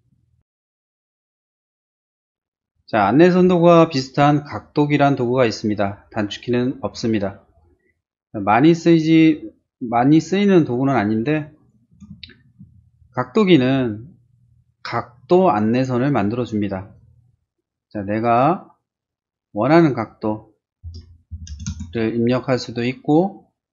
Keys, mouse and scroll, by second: 0.1 middle click, 1.1 click, 1.6 click, 11.6 click, 12.3 shift+middle click, 12.7 shift+middle click, 14.8 click, 15.5 click, 16.8 click, 18.8 click, 20.0 click, 21.1-22.0 typing.